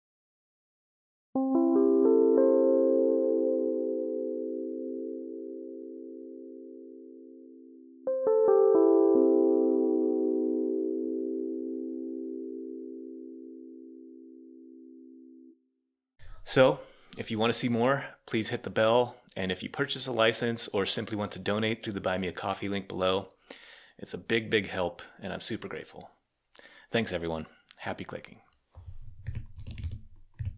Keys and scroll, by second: 29.1-30.4 typing.